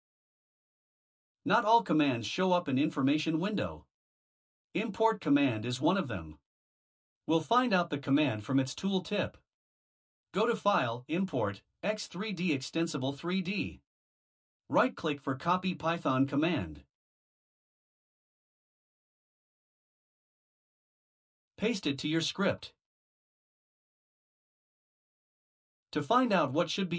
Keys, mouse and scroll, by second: 0.0-0.4 typing, 1.5 Return, 2.1 Return, 8.1 click, 23.4 ctrl+v.